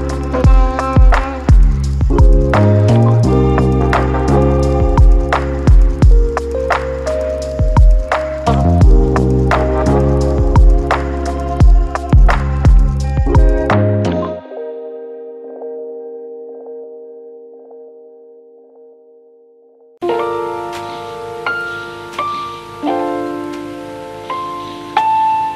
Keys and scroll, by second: 1.3 1, 13.3 ctrl+z, 13.5 ctrl+z, 13.8 ctrl+z, 19.9 z, 24.0 j.